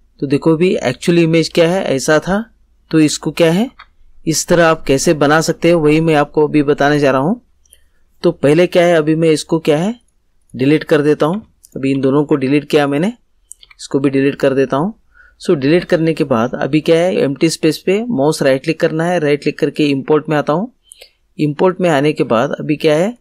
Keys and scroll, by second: 3.6 ctrl+z, 11.3 Delete, 13.6 Delete.